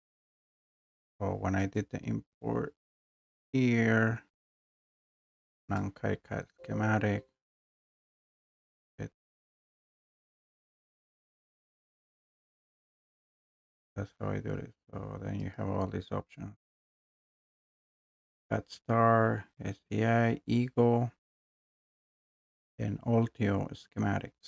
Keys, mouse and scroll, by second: 1.7 click, 5.8 click, 8.5 click, 15.5 click, 16.3-24.4 drag.